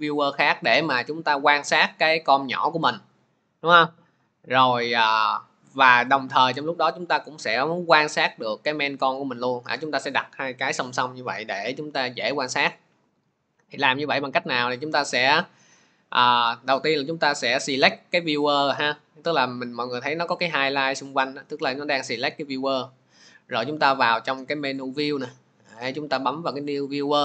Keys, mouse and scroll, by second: 1.8-11.1 drag, 14.6-16.9 drag, 17.8 click, 22.2 click, 24.8 click.